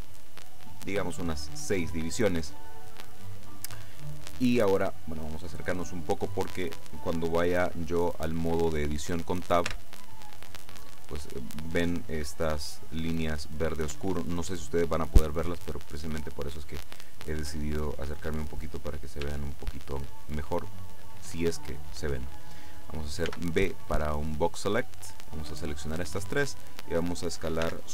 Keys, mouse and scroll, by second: 0.9 click, 2.0-5.2 middle drag, 5.2-5.9 scroll up 1, 9.8 Tab, 18.4-19.0 scroll up 1, 19.5-21.6 shift+middle drag, 23.4 b, 24.4-26.5 drag, 27.7 s.